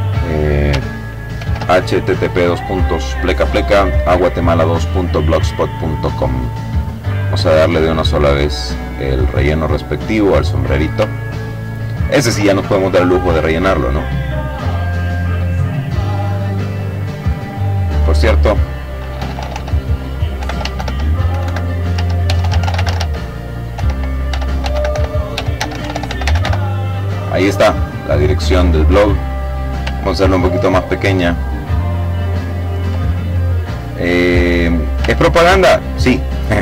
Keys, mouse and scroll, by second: 4.3 click, 5.1 click, 6.6 click, 8.6 click, 9.7-10.1 ctrl+scroll down 2, 10.2-11.3 ctrl+drag, 11.8-15.1 drag, 15.6 click, 17.5 h, 17.8 t, 18.8-25.3 typing, 26.8 click, 28.5-29.0 ctrl+scroll down 1, 29.9-31.6 ctrl+drag, 32.0-33.7 drag, 33.7-34.2 ctrl+scroll up 1, 34.7-36.1 ctrl+drag.